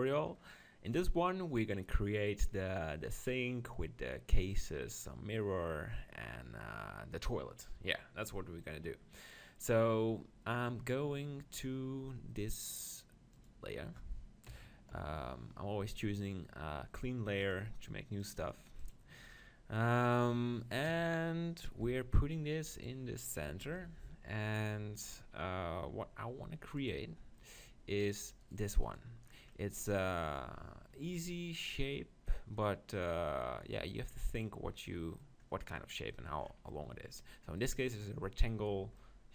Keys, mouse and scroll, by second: 13.3-15.7 drag, 14.5 KP_7, 14.9 KP_5, 17.8-19.4 drag, 19.4 middle click, 20.9 KP_5, 21.8 g, 22.9-24.6 drag, 24.6-26.8 middle drag, 26.8 right click, 27.4 click, 28.0-30.7 middle drag, 36.4-39.3 middle drag.